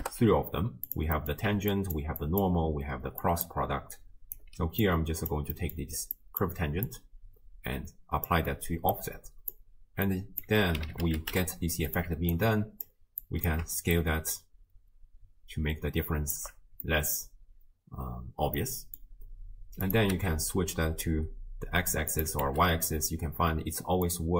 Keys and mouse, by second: 1.2 click, 1.5-3.9 d, 1.7 click, 3.2 click, 3.9 click, 4.4 d, 4.5 d, 4.9-5.3 drag, 5.6 middle click, 6.2 click, 6.9-8.3 drag, 9.0 click, 10.1-12.0 drag, 12.3 alt+click, 13.3 click, 14.0-16.4 shift+drag, 16.8 middle click, 18.6 middle click, 19.8 click, 22.1 click, 23.1-24.1 middle drag.